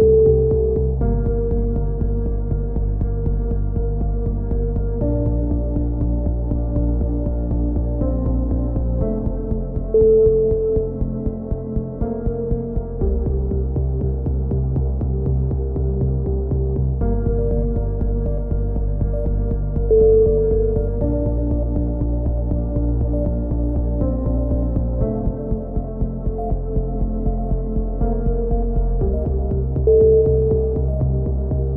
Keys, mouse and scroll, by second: 0.1 click, 2.3 a, 2.5 middle click, 2.9 click, 5.0-6.8 drag, 6.5 KP_7, 7.3 e, 8.0 click, 10.9 z, 11.5 click, 12.4 click, 13.3 middle click, 13.7 click, 14.6-16.0 right drag, 14.8 ctrl+z, 16.0 click, 16.5-18.0 right drag, 17.9 KP_7, 19.2 click, 20.8 s, 24.6 a, 25.0 Tab, 26.4 z, 29.3 KP_1, 29.8 z.